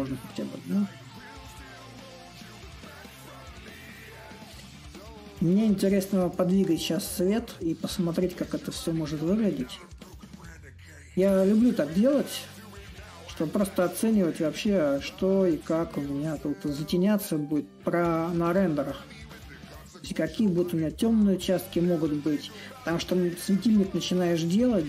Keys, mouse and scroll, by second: 0.0-5.1 shift+drag, 5.6-6.8 drag, 6.8-7.9 right drag, 7.9-13.3 drag, 13.8-18.8 drag, 20.6-24.8 drag.